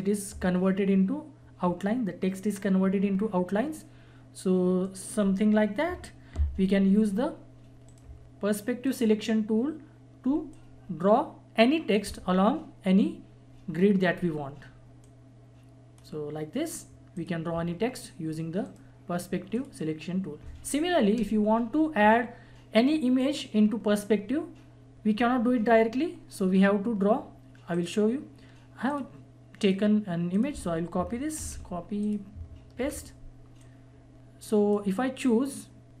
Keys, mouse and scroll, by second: 4.8 click, 7.9 right click, 8.8-14.6 drag, 15.0-17.1 drag, 18.6 right click, 19.5 click, 21.7 click, 27.7 click, 31.3 ctrl+c, 32.0 click, 32.8 ctrl+v, 33.6-36.0 drag.